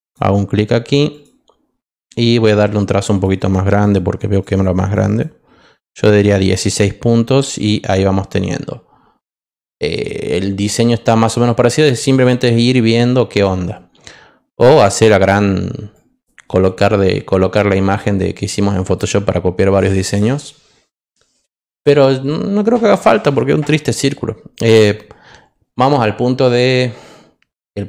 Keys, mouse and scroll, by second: 1.1 click, 3.0 click, 3.3 click, 3.6 click, 3.9 click, 4.3 click, 4.5 click, 4.7 click, 5.0 click, 15.9-18.9 drag.